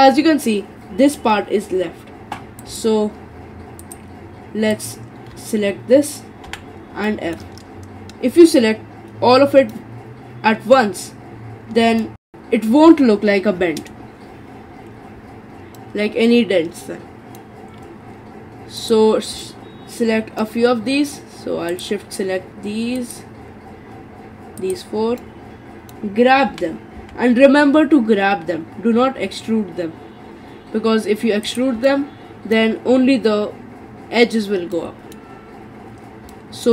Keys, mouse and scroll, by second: 2.6 click, 3.8 shift+click, 4.7 shift+click, 6.5 f, 7.1 middle click, 7.6-9.7 scroll down 7, 9.7-14.0 middle drag, 14.0-14.8 scroll up 4, 14.8-15.8 scroll down 5, 15.8-18.8 middle drag, 18.8 click, 19.4-21.7 middle drag, 21.7 shift+click, 23.0 shift+click, 24.6 shift+click, 25.2-26.5 middle drag, 26.5 g, 31.9-36.0 middle drag, 36.0-36.3 scroll up 3, 36.3-36.7 middle drag.